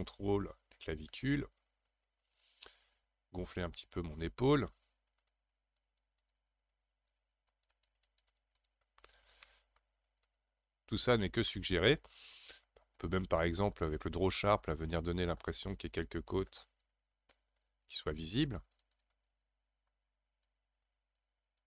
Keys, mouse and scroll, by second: 4.8 f, 5.8-9.0 drag, 9.0-9.4 scroll down 3, 9.4 middle click, 10.1 shift+click, 10.9-11.4 scroll down 2, 11.4-12.9 middle drag, 12.9 scroll up 3, 13.8 click, 14.3-15.2 scroll up 1, 15.4-21.6 drag.